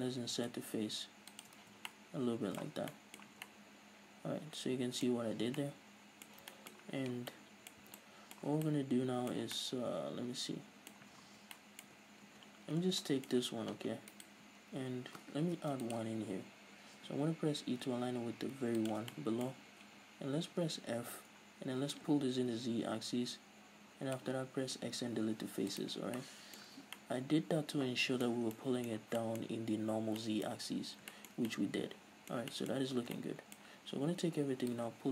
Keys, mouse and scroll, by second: 1.5 shift+click, 1.6 z, 1.9-14.2 middle drag, 2.7 Tab, 2.8 scroll down 2, 3.3 Tab, 5.2 scroll up 2, 5.5 Tab, 7.9 Tab, 8.5 Tab, 11.1 a, 11.9 Tab, 12.1 scroll up 2, 12.3 Tab, 12.9 scroll down 2, 14.2 alt+right click, 14.9-15.3 scroll up 1, 15.6 ctrl+r, 18.9 shift+click, 19.2-22.6 middle drag, 20.7 f, 22.6-26.2 drag, 24.5 x, 26.2-35.1 middle drag, 26.7 Tab, 26.9 scroll down 2, 30.9 scroll down 2, 32.8 scroll up 2, 33.0 Tab, 33.7 a.